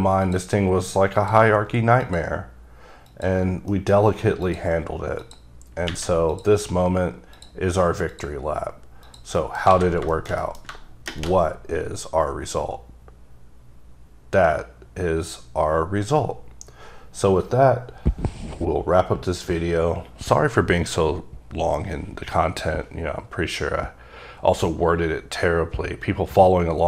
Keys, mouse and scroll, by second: 0.4 click, 1.3 click, 2.5 click, 3.2 click, 3.6 scroll down 2, 3.9 middle click, 4.1-4.6 scroll up 2, 4.6 click, 5.4 click, 6.4 click, 7.5 click, 8.2 click, 9.2 click, 9.6 middle click, 9.7 scroll down 1, 9.8 alt+a, 10.3 shift+middle click.